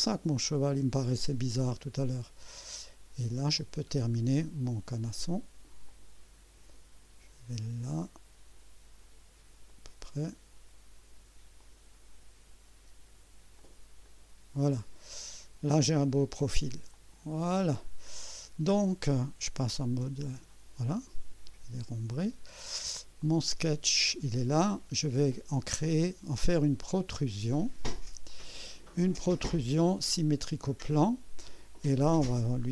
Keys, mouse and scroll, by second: 3.5 click, 5.8 click, 9.7 click, 11.6 click, 13.6 click, 14.0 right click, 16.9 click, 18.1-18.8 scroll down 4, 20.9 right click, 23.2 click, 23.6 space, 26.0-27.0 drag, 28.3 click, 30.4 click, 32.0 click.